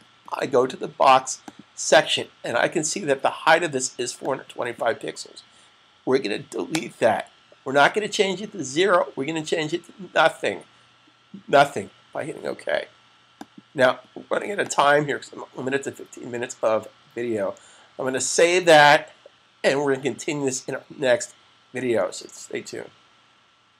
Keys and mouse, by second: 1.4 click, 4.1 click, 13.1 click, 18.2 super+s.